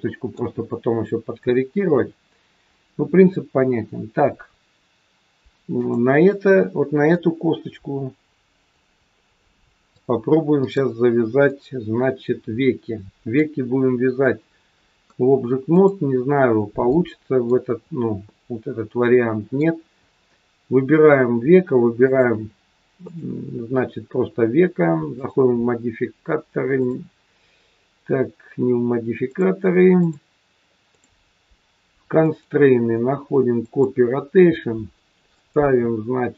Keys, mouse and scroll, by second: 1.8 KP_3, 3.9-4.9 scroll up 1, 5.7 click, 7.2 click, 9.9 click, 11.4 middle click, 13.9-14.6 scroll up 2, 14.8-15.6 scroll down 1, 15.6 click, 16.8 middle click, 18.8 middle click, 21.9 shift+click, 22.9 click, 25.0 click, 26.7 click, 29.2 click, 29.9 click, 30.8 click, 32.2 click, 35.3 click.